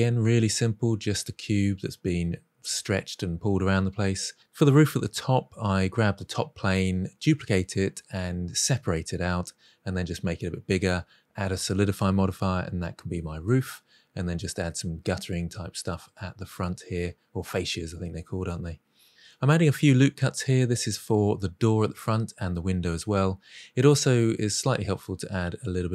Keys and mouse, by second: 0.0 n, 0.4 shift+d, 0.9 p, 1.2 middle drag, 1.4 Tab, 2.3 click, 3.2 click, 3.4-4.2 middle drag, 4.3 ctrl+a, 4.8 middle click, 5.8 middle click, 6.0 middle click, 6.1 Tab, 7.0-9.9 typing, 8.7 drag, 8.8 middle drag, 10.0-10.5 middle drag, 10.7 Tab, 10.7 click, 11.1-17.2 typing, 11.5 middle click, 12.6 middle drag, 13.5 shift+middle click, 14.0 Tab, 14.3 alt+z, 14.7 click, 15.1 click, 15.4 middle drag, 15.7 middle click, 16.1 click, 16.9 click, 17.8 click, 17.9 middle click, 18.2 middle click, 18.7 Tab, 18.8 ctrl+r, 19.2 click, 19.8 middle click, 19.8 ctrl+r, 19.9 click, 20.4 ctrl+r, 20.7 click, 20.9-21.3 middle drag, 21.4 alt+z, 21.5 middle click, 21.9 Tab, 22.0 click, 22.7 alt+z, 22.8 click, 23.0 g, 23.3 click, 23.4 middle click, 23.9 middle click, 24.2 s, 24.4 z, 24.6 g, 24.8 click, 25.2 click, 25.5 s.